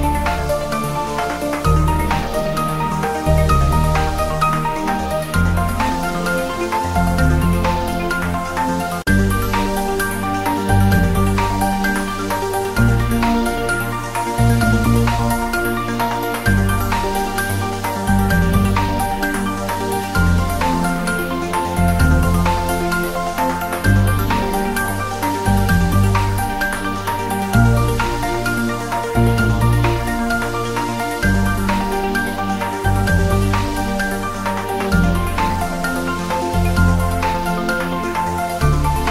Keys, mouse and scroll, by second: 0.5-3.5 drag, 3.5-3.9 scroll down 1, 5.2 click, 6.5 click, 7.6 click, 9.2-9.8 scroll down 1, 11.2 ctrl+s, 11.9-12.4 click, 12.8-13.3 scroll down 1, 13.3 click, 13.4-14.0 scroll up 1, 14.0 click, 17.0 click, 17.7 scroll up 1, 18.7 click, 20.3 click, 21.4 click, 26.4 click, 27.3 click, 31.3-32.0 drag, 37.2 click, 38.8 scroll down 1.